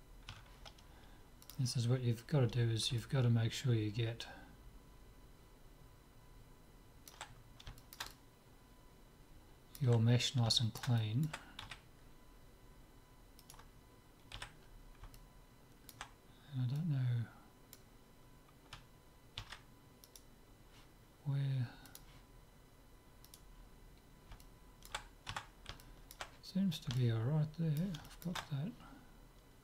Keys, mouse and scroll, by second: 0.3 Tab, 1.5-3.2 drag, 3.0-5.1 middle drag, 7.3-10.0 middle drag, 10.6-12.3 middle drag, 11.6 z, 13.4-15.2 right drag, 14.4 z, 15.2-16.8 middle drag, 16.8-18.6 drag, 19.4 ctrl+z, 20.3-21.9 right drag, 21.9-23.7 drag, 23.3-25.0 right drag, 24.1 middle click, 24.5 click, 25.0-29.6 middle drag, 25.5 Tab.